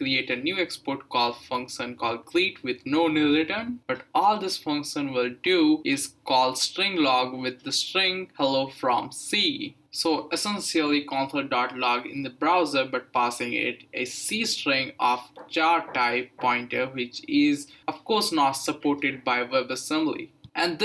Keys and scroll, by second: 1.2-8.2 typing, 9.3-10.4 typing.